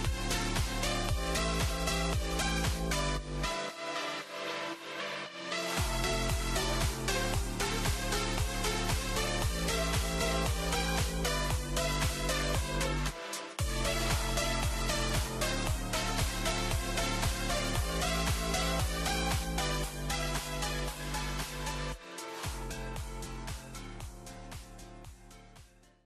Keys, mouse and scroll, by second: 1.3-3.7 middle drag, 3.7 click, 4.1-5.0 scroll up 5, 5.0-5.4 scroll down 1, 5.7-8.1 scroll down 1, 8.1 n, 12.2-18.2 middle drag.